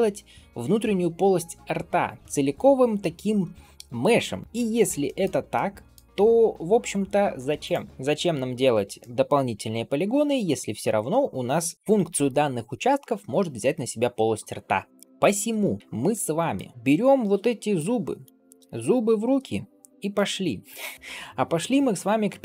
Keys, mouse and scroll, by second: 4.5-4.8 scroll down 1, 4.9 shift+middle click, 5.4-5.8 middle drag, 6.1 Tab, 7.5 click, 8.8-12.1 middle drag, 14.9 ctrl+s, 14.9 middle click, 15.8 scroll down 1, 16.0-16.4 middle drag, 16.7 scroll down 1, 17.6-18.4 drag, 19.1 ctrl+s, 19.9 scroll up 1, 20.0-20.5 middle drag, 20.6 scroll down 2, 21.6-22.4 scroll down 1, 21.6 KP_1.